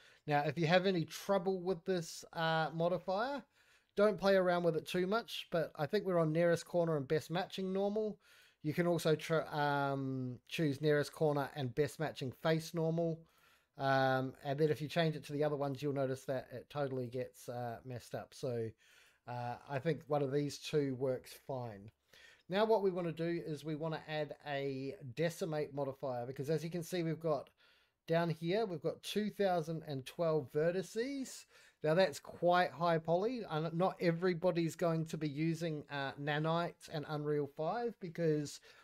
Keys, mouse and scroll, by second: 1.7 middle click, 2.2-2.6 scroll down 1, 2.9 middle drag, 4.7-7.3 drag, 8.3-12.3 drag, 13.2-14.7 drag, 15.6-16.3 drag, 16.9-17.7 drag, 18.3-19.0 drag, 19.9-20.7 drag, 21.2 scroll down 1, 21.4-21.7 middle drag, 23.3-26.2 drag, 30.3 middle click.